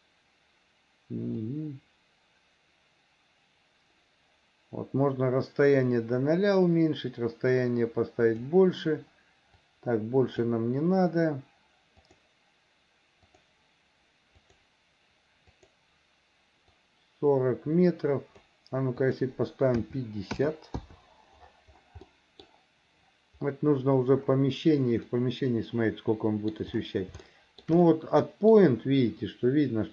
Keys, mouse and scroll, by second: 1.5-8.5 drag, 9.6 click, 12.1 click, 13.3 click, 14.5 click, 15.6 click, 16.8-18.5 drag, 19.1-20.9 drag, 22.1 middle click, 25.1-26.6 middle drag, 27.3 shift+middle click, 27.9 middle click.